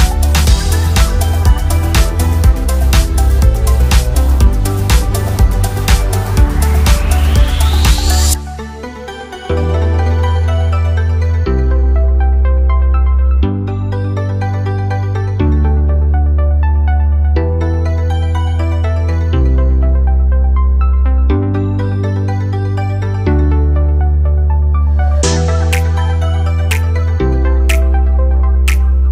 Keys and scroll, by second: 24.2 ctrl+a.